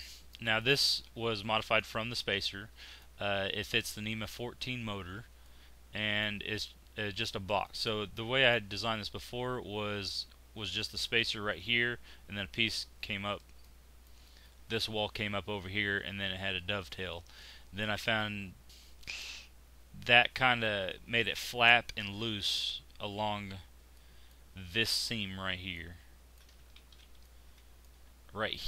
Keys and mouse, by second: 0.0 middle click, 5.4-7.5 middle drag, 13.6 middle click, 17.4-18.6 middle drag, 20.8-24.1 middle drag, 26.9 ctrl+z.